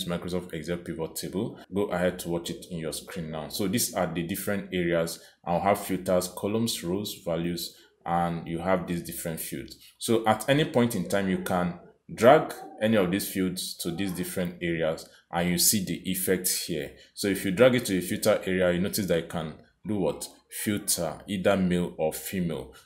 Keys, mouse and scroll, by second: 2.6 click, 11.8 click, 19.4 click, 21.7 click.